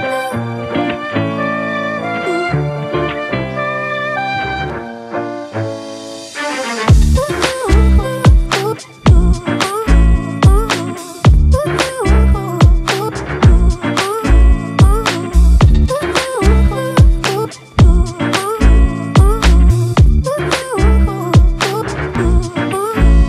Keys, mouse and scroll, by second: 17.5 double click.